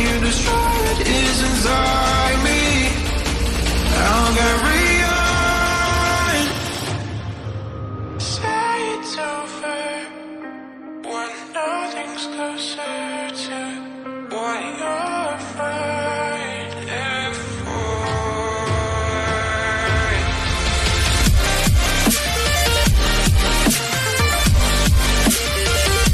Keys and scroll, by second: 3.4 ctrl+j, 17.7 ctrl+j, 17.7 ctrl+a, 24.6 ctrl+a, 24.9 ctrl+d.